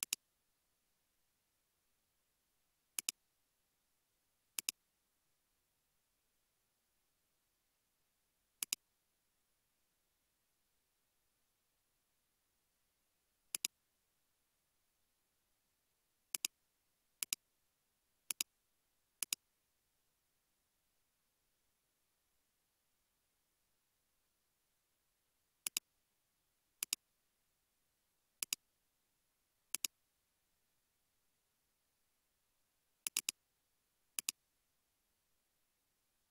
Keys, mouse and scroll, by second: 33.3 double click, 35.8 space.